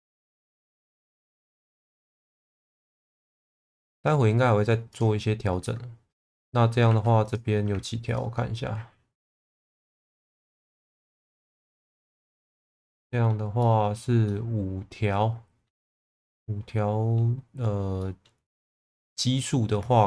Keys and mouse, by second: 5.6 middle click, 6.8 2, 7.2 click, 8.1 ctrl+click, 10.5-12.4 drag, 12.9 middle click, 13.6 middle click, 14.3-15.6 middle drag, 16.3 middle click, 18.0 middle click.